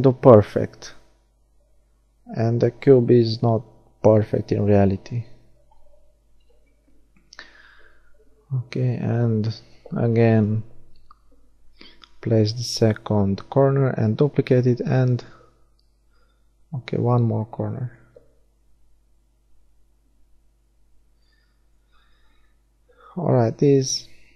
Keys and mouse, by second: 0.5-2.5 middle drag, 3.4 g, 6.7 click, 9.9 middle click, 11.9 shift+d, 12.4 click, 12.5-13.8 right drag, 13.3 r, 21.8-23.9 middle drag, 23.9 g.